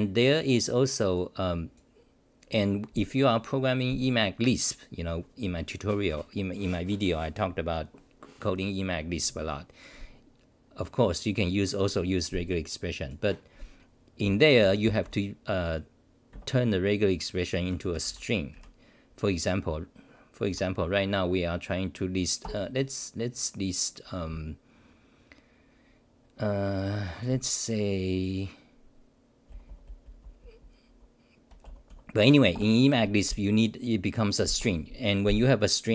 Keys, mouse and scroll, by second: 16.3 Up, 18.0 ctrl+=, 22.4 ctrl+g, 23.1-23.8 scroll down 9, 29.5 scroll down 1, 29.5-30.5 typing, 31.9 BackSpace, 32.5 ctrl+g.